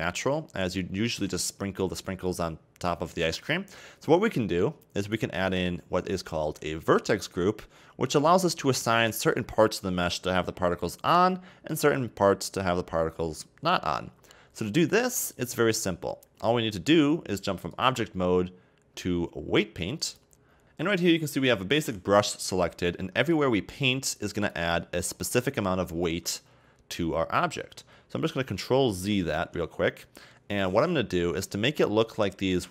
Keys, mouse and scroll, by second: 0.8-3.4 scroll down 4, 3.4-5.0 middle drag, 5.0 right click, 8.7-10.6 middle drag, 10.6 scroll down 2, 10.7-17.7 middle drag, 17.7-20.6 drag, 22.8-23.4 scroll down 1, 23.4-25.2 drag, 25.2-27.1 scroll up 1, 27.1-28.4 scroll down 2, 28.4 ctrl+x, 29.5 ctrl+z, 30.4-32.5 scroll down 1, 32.5-32.7 scroll up 3.